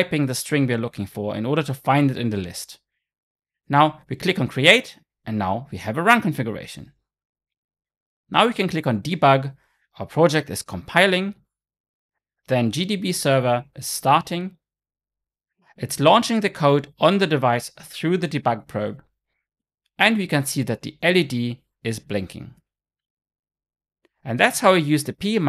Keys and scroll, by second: 11.5 shift+F9.